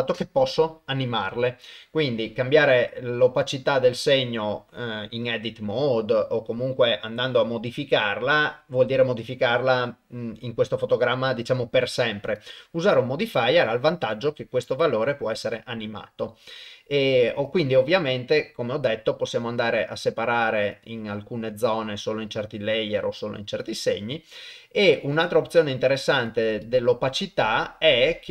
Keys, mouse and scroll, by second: 12.4-14.3 drag, 17.5 click, 20.7 click, 23.7 click, 26.6-28.3 drag.